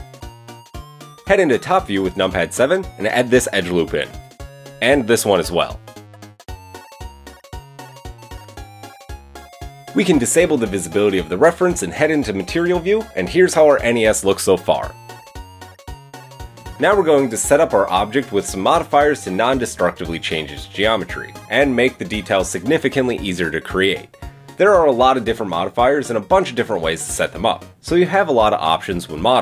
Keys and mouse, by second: 0.2 KP_3, 0.3 middle click, 1.1 KP_7, 1.3-8.3 shift+middle drag, 2.0 ctrl+r, 2.7 ctrl+r, 4.7 ctrl+r, 8.7-11.2 middle drag, 9.0 KP_7, 11.2-12.9 drag, 12.9-17.9 middle drag, 14.0 Tab, 17.8 Tab, 17.9-20.1 drag, 18.2 Tab, 20.1-20.8 middle drag, 20.8 click, 21.2-29.4 shift+middle drag.